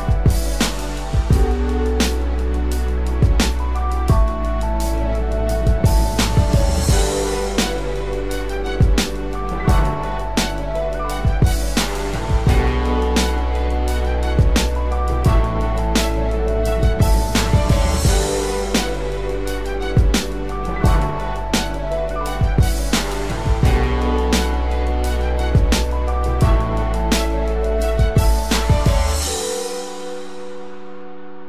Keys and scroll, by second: 0.1 ctrl+-, 1.1 ctrl+=, 2.9 ctrl+=.